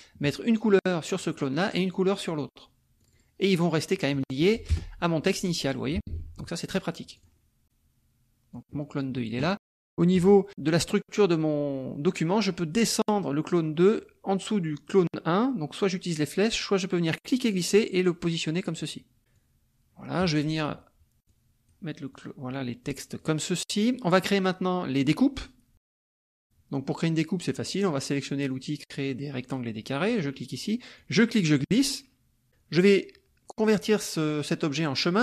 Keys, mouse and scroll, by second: 1.2 click, 2.2 click, 3.1 click, 3.5 click, 4.0 click, 4.7 BackSpace, 6.1 ctrl+z, 7.2 click, 7.6-8.8 drag, 17.1-18.2 drag, 19.3-21.9 drag, 22.1-23.7 drag, 23.7 middle click, 25.0 middle click, 25.9 click, 30.1 click, 31.0-32.4 drag.